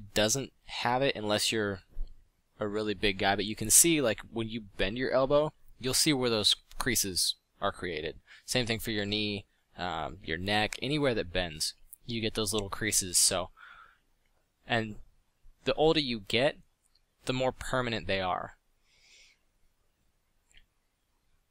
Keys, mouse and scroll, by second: 13.9 f.